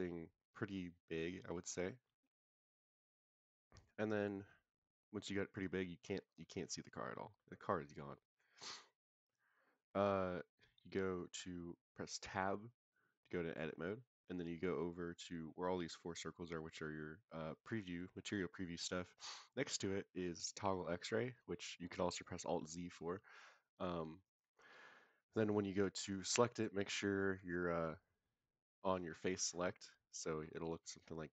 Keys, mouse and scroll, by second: 1.7 click, 6.4-7.3 middle drag, 8.2 click, 10.3-10.7 scroll down 1, 10.7-11.3 scroll up 1, 12.8 Tab, 20.6 click, 23.0 scroll down 1, 24.2 drag, 29.1 click.